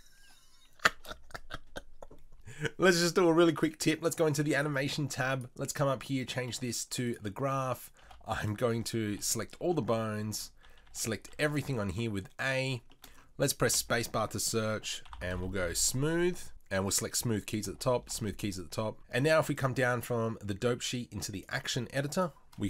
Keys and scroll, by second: 1.0 shift+space.